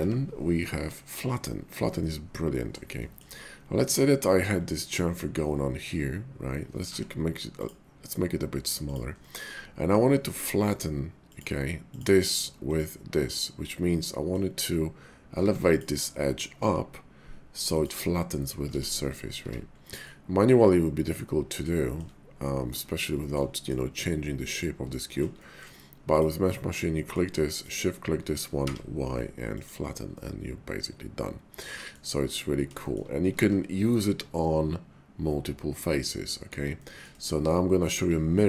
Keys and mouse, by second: 0.0 y, 2.0 middle click, 2.9 shift+middle click, 3.9 middle click, 6.8 y, 8.9 click, 9.2 middle click, 10.4 middle click, 11.2 click, 11.8 click, 12.6 click, 13.3-14.3 middle drag, 15.3 Tab, 15.7 click, 16.6 g, 17.8 click, 18.8 ctrl+z, 19.1 middle click, 19.4 Tab, 20.0-21.7 drag, 21.9 shift+click, 22.4 click, 23.2 shift+click, 23.5 middle click, 24.5 middle click, 25.1 shift+middle click, 25.4 middle click, 26.0 click, 26.7 middle click, 27.4 shift+click, 28.6 y, 30.2-32.3 drag, 32.8 shift+click, 33.4 ctrl+z, 34.4 click, 34.5-36.5 middle drag, 36.7 shift+middle click.